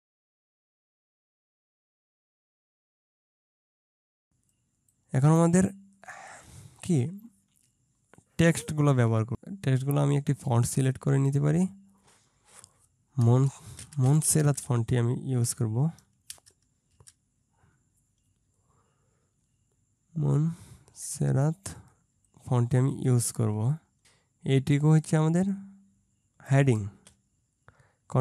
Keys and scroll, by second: 13.3-14.7 typing, 16.3 BackSpace, 17.0 BackSpace.